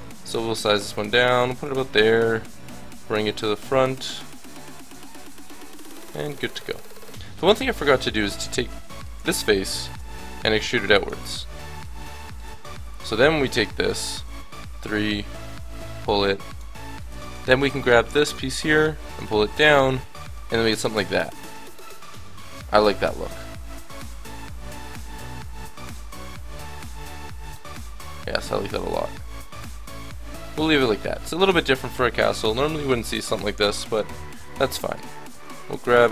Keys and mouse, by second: 0.0 g, 1.1 s, 1.4 g, 1.9 middle click, 2.9-4.9 drag, 4.9 middle click, 6.0 click, 7.5-8.8 drag, 10.2 e, 11.2 Tab, 12.4 Tab, 13.6 l, 14.2 KP_3, 16.5 click, 17.5 a, 17.6 b, 19.1-20.5 drag, 19.5 Tab, 23.9 middle click, 26.1-29.1 middle drag, 30.0 Tab, 31.1 a, 31.7 click, 32.3 l, 33.2 KP_7, 33.9 shift+d, 34.6-36.1 drag.